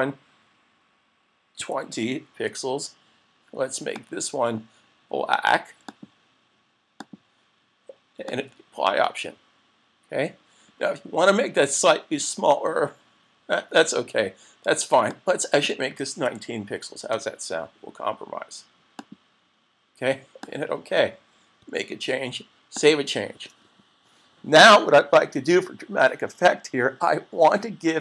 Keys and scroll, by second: 21.7 super+s.